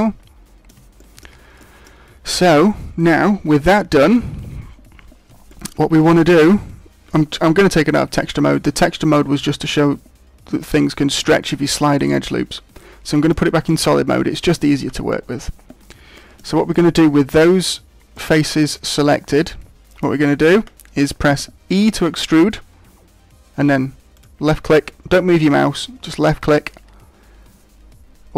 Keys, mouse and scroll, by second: 0.9 shift+middle click, 5.4 shift+middle click, 5.9 middle click, 11.9 click, 14.1 shift+middle click, 15.6 scroll up 1, 16.1 shift+middle click, 16.7 middle click, 18.2 middle click, 19.3 middle click, 20.2 middle click, 21.7 e, 24.2 click.